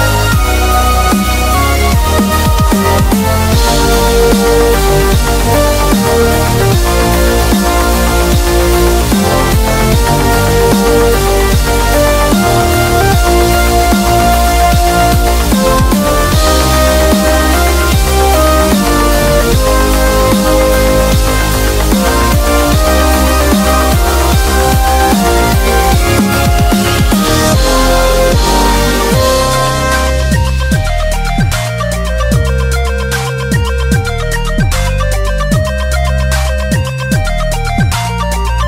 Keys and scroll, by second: 8.0 b, 17.5 super+i, 21.7-22.2 typing, 24.4 v, 26.6 super+b.